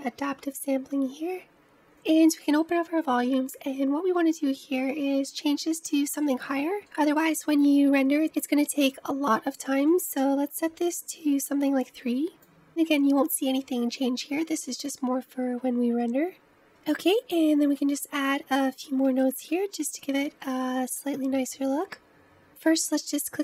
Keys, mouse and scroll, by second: 0.1-1.8 drag, 2.1-5.1 drag, 6.0-17.7 drag, 17.7 scroll up 1, 17.8-22.4 middle drag, 22.9 click.